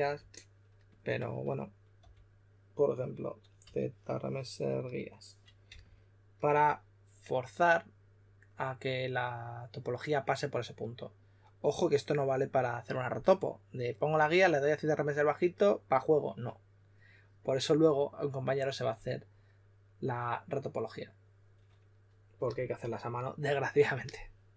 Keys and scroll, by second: 1.9 b, 3.3-4.1 typing, 5.6 typing.